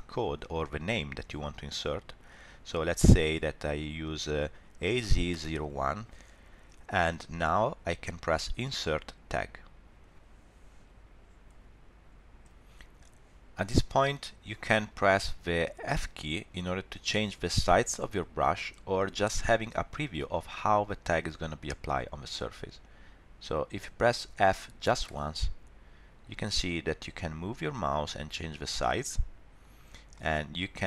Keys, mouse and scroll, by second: 9.3 click, 10.1 ctrl+alt+r, 25.1 f, 30.1 middle click.